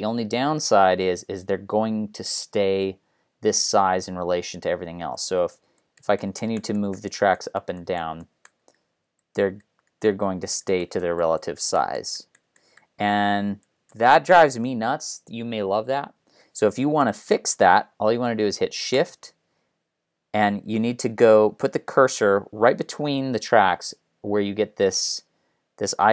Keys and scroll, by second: 5.6 ctrl+alt+Down, 6.2 ctrl+alt+Up, 6.9 ctrl+alt+Up, 10.4 ctrl+alt+Down, 14.3 ctrl+alt+Up, 15.8 ctrl+alt+Down, 16.4 ctrl+alt+Up.